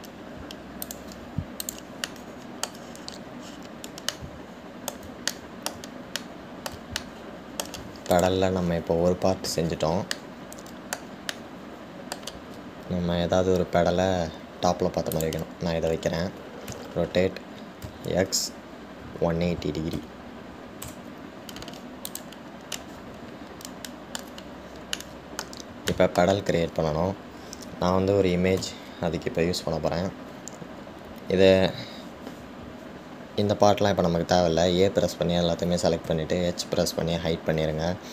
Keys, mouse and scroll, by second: 2.8 click, 3.3 middle click, 4.0-4.7 scroll down 1, 4.7-5.3 scroll down 9, 5.3-9.3 middle drag, 9.3 drag, 11.3-15.6 middle drag, 16.3 click, 23.3 click, 24.0-25.6 middle drag, 25.6-26.1 scroll down 2, 26.1-29.8 middle drag, 29.8 a.